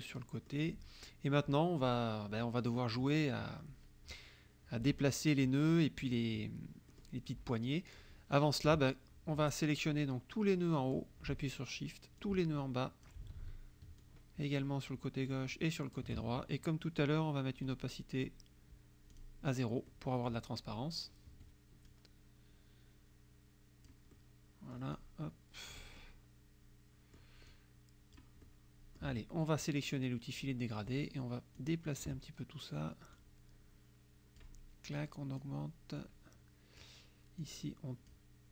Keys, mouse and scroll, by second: 0.0 click, 1.8 click, 2.7 click, 4.9 KP_Subtract, 6.9 click, 8.7 KP_Subtract, 9.8-11.2 drag, 12.3 shift+click, 14.0 shift+click, 15.3 shift+click, 17.6 right click, 19.2 click, 19.9 click, 21.3 F1, 21.9-24.1 drag, 24.2-26.0 drag, 26.0-27.4 drag, 27.5 click, 28.5 middle click, 30.4 click, 31.7 click, 33.3-34.7 drag, 35.0 click, 36.0 click, 37.5 click.